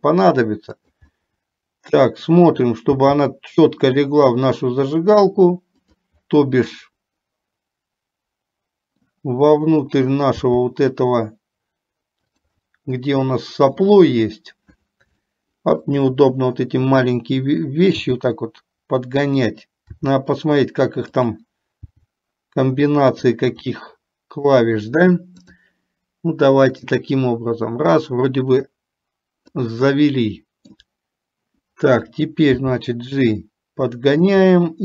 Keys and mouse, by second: 0.0 g, 1.2-2.7 middle drag, 7.1-9.3 middle drag, 10.6 g, 13.0-14.0 middle drag, 15.3 shift+middle click, 18.1 g, 20.2 r, 22.1 g, 24.0 middle click, 26.8-30.1 drag, 30.1-31.1 middle drag, 33.3 g, 34.6 middle click.